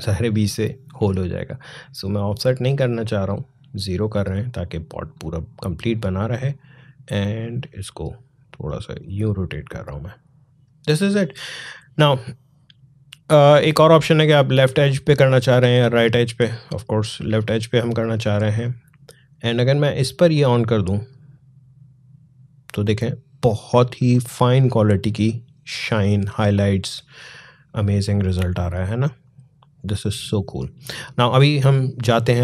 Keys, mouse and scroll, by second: 13.7 click, 20.8 click, 28.0 click.